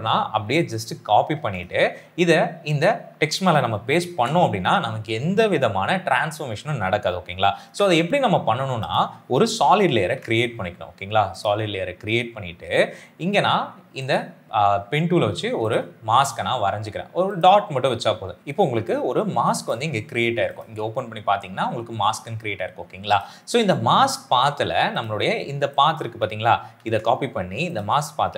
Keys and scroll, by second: 1.2 ctrl+c, 4.0 ctrl+v, 7.5 ctrl+z, 9.9 ctrl+y, 26.6 ctrl+c.